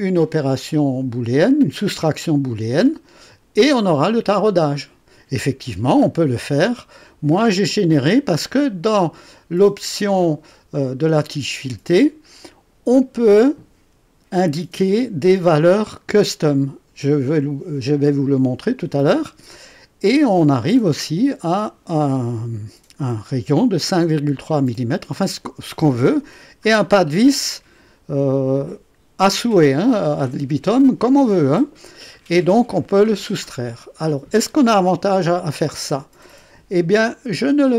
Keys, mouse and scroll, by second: 2.8-3.9 drag, 6.1-6.5 scroll down 2, 7.6 click, 8.5 scroll up 1, 9.0 right click.